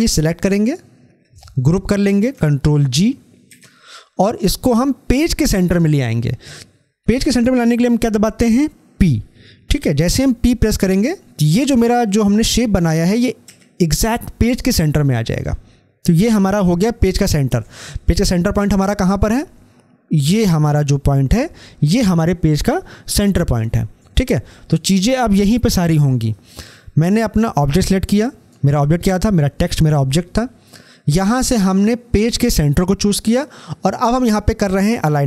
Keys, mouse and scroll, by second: 0.5 shift+click, 13.3 ctrl+g, 13.5 p, 18.7 scroll up 1, 23.4 scroll down 1, 26.8 scroll down 1.